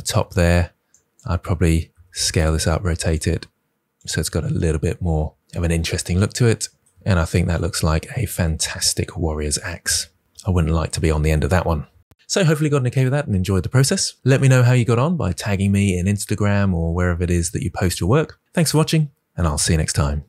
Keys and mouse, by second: 0.1 Tab, 0.8 click, 1.9 s, 2.3 click, 2.5 r, 3.0 click, 3.1 s, 3.9 click, 10.4 Tab.